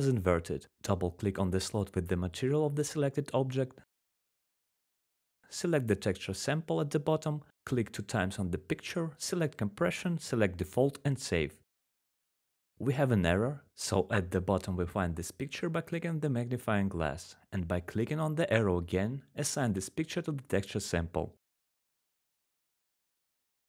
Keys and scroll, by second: 2.7 typing, 3.9-4.7 typing, 8.4 typing.